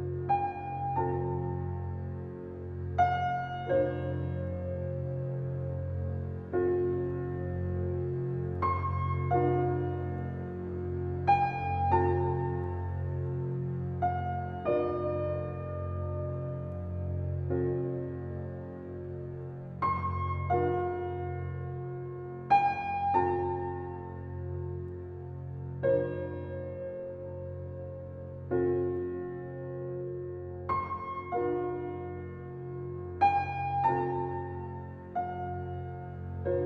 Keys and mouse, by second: 0.0 click, 1.1 click, 4.3-5.4 drag, 7.9 click, 10.3 click, 11.5 ctrl+x, 12.2 ctrl+click, 13.0 click, 13.8 click, 14.7 ctrl+v, 15.7 drag, 16.0 click, 16.9 shift+Delete, 17.2 Return, 19.1 click, 22.6 click, 24.2 click, 26.1 click, 26.7 click.